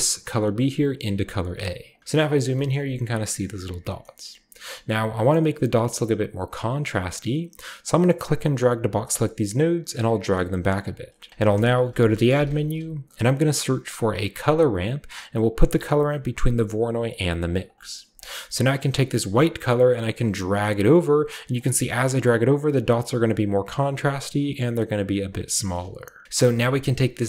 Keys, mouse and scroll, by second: 1.8 click, 2.0 scroll up 1, 2.5 shift+middle drag, 3.7 scroll down 1, 3.9 middle click, 4.4 middle click, 4.4-6.5 scroll down 1, 4.6-6.5 middle drag, 8.0-9.0 drag, 9.1-9.6 scroll down 1, 9.6-11.0 drag, 11.2-12.3 scroll up 2, 11.3-12.6 typing, 11.6 shift+click, 12.3-12.8 shift+scroll up 1, 14.2 click, 17.1 click, 17.4 click, 17.9-19.2 scroll up 2, 19.2-21.4 drag, 19.2-21.4 scroll up 1, 21.5-22.4 scroll up 2, 22.4-25.1 drag, 22.4-25.1 scroll up 1, 25.3-26.2 scroll down 2, 26.2-27.2 scroll up 1, 26.2 typing, 26.6 click.